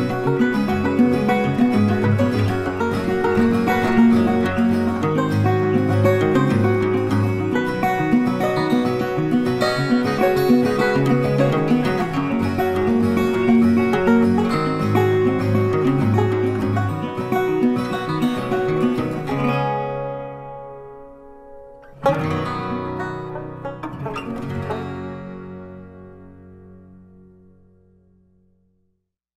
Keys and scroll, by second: 9.1 ctrl+t.